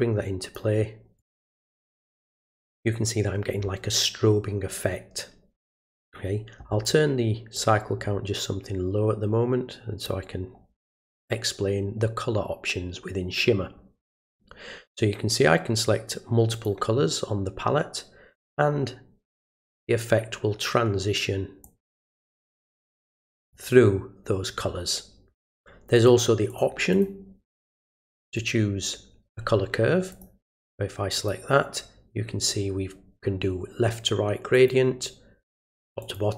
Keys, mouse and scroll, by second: 1.2 click, 6.0 click, 7.5-10.0 drag, 16.5 click, 19.2 click, 21.6 click, 23.1-23.5 drag, 25.9 click, 26.5 click, 26.9 click, 27.4 click, 28.2 right click, 30.1 click, 31.1 click, 34.5 click, 36.0 click.